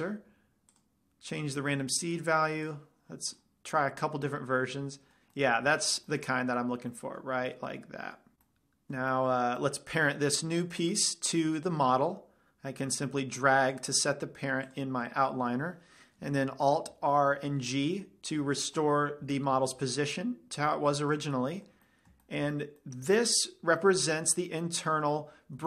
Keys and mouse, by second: 0.3-3.0 drag, 0.3-1.8 right drag, 2.4 right click, 4.8-6.2 middle drag, 6.5-7.0 middle drag, 9.3-11.0 middle drag, 11.0-13.7 drag, 15.2-17.0 drag, 17.4 alt+r, 17.8 alt+g, 19.2-20.0 middle drag, 21.6-23.7 drag, 22.2-23.0 middle drag, 23.7-25.2 middle drag.